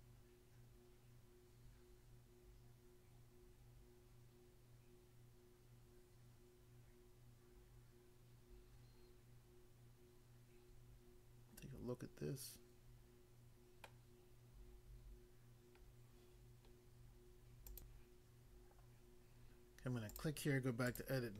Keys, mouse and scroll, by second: 13.9 middle click, 17.7 click, 18.0 click, 20.0 click, 20.2 click, 20.9 click.